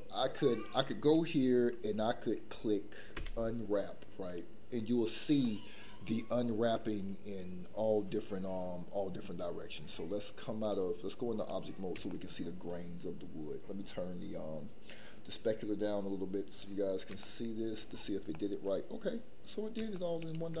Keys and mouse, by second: 3.1 u, 10.8 click, 12.1 shift+middle click, 15.5 click, 17.2 shift+middle click, 18.3 middle click, 19.9 shift+middle click.